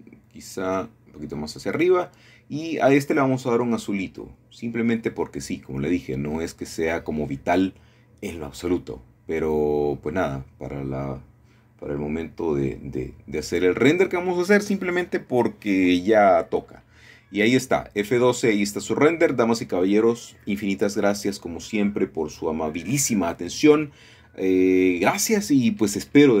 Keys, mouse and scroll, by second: 1.6 middle click, 2.4 r, 3.3 x, 4.3-5.4 drag, 5.4 middle click, 6.1-7.2 drag, 9.0-11.0 drag, 11.0-12.1 scroll down 1, 12.1 middle click, 12.4-13.2 scroll up 1, 14.0 middle click, 15.3 KP_2, 15.5 KP_5, 15.6 KP_0, 15.8 Return, 16.8-17.5 scroll down 1, 17.7 shift+middle click, 18.2 KP_0, 19.6 F12, 23.4-24.4 scroll down 2, 25.4-26.4 scroll up 2.